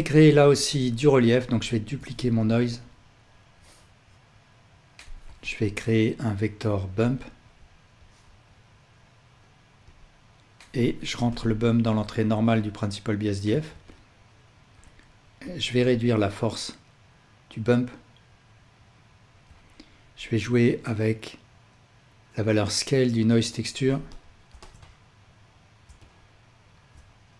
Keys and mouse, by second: 0.4 shift+click, 0.4 shift+a, 1.9 shift+d, 3.4-7.4 drag, 5.2 shift+a, 7.9-10.9 drag, 11.2-13.6 ctrl+alt+drag, 21.0 click.